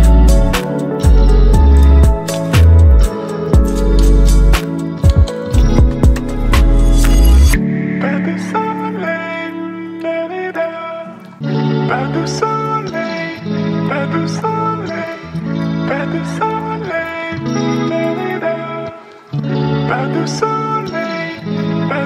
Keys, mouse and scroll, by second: 1.3 click, 3.2-8.6 typing, 9.7 ctrl+a, 11.4 click, 15.5 v, 16.5-18.0 drag, 18.0 ctrl+t, 19.7-22.0 shift+drag.